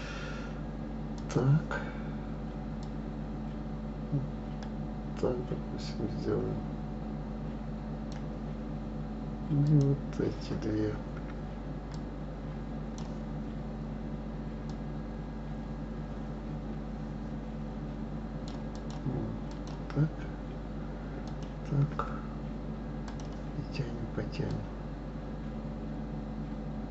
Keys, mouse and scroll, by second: 1.2 click, 2.8-5.8 drag, 9.6 click, 11.9-17.7 drag, 18.7 click, 19.5 click, 21.3 shift+click, 23.1-26.9 drag.